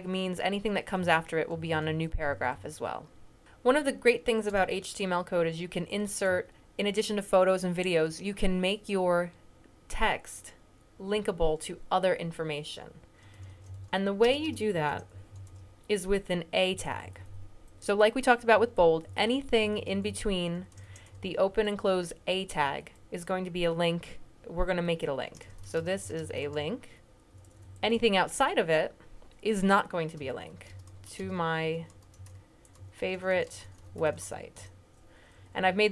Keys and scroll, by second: 0.2 Right, 0.6 Right, 0.9 Down, 1.4 Up, 1.5 Up, 1.7 Up, 2.0 Up, 2.1 Up, 2.3 Up, 2.4 Up, 2.7 Down, 5.6 Up, 6.1 Down, 13.0-15.8 typing, 27.8 typing, 30.1-34.6 typing, 35.2 Up, 35.5 Up, 35.8 Down.